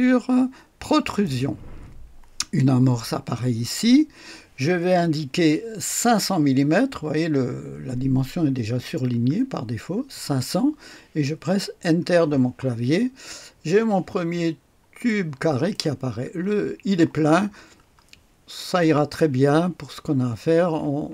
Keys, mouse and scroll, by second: 1.0 click, 9.1 KP_5, 9.7 KP_0, 10.1 KP_0, 11.9 Return, 12.8-13.6 scroll down 1, 14.1-15.0 scroll up 1, 15.0 middle click, 15.7 click, 17.3-18.3 scroll down 1, 18.8 middle click.